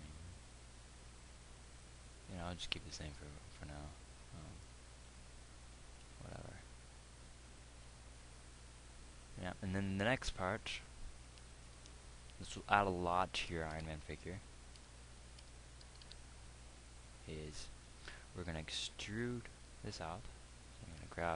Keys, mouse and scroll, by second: 5.0 Escape, 14.2 Tab, 15.4 Tab, 16.8 z.